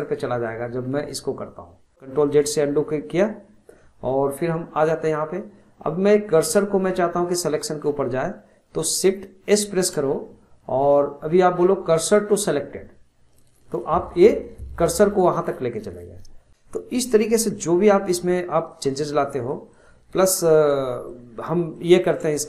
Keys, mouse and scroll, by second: 1.9 ctrl+z, 9.6 shift+s, 17.9-18.9 middle drag, 19.3-19.7 middle drag, 20.7-21.4 middle drag, 21.4-21.8 scroll down 1, 21.8-22.4 shift+middle drag.